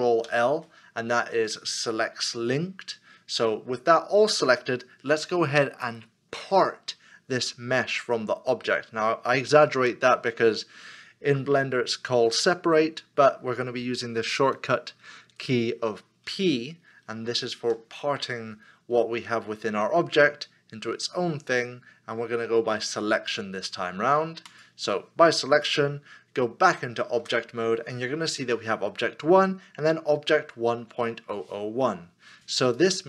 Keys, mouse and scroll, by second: 0.2 ctrl+l, 17.6 p, 27.2 p, 27.2 Tab.